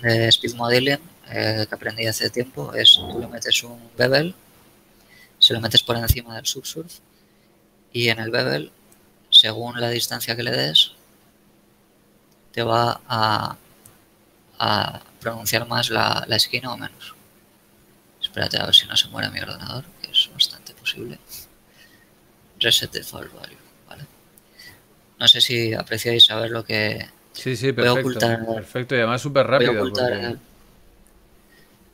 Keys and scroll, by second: 29.9 z.